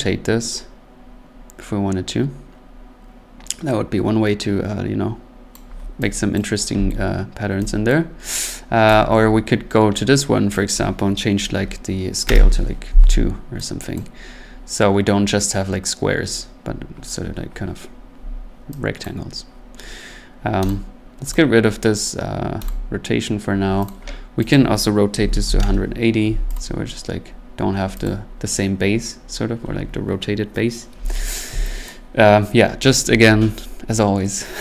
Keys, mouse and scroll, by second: 5.5 click, 6.3 click, 7.1 middle click, 7.9 click, 8.9 click, 9.2 middle click, 9.3 middle click, 10.7 click, 12.2 2, 12.3 Return, 13.9 click, 14.2 middle click, 14.7 middle click, 16.6 middle click, 17.3 scroll up 3, 18.2-18.7 scroll up 2, 19.0 click, 20.7 click, 21.3 click, 22.7 click, 23.9 click, 24.5 click, 25.0-26.0 typing, 26.5 click, 26.9 middle click, 27.5-28.2 typing, 28.0 click, 31.2 middle click, 31.3 middle click, 31.8 click.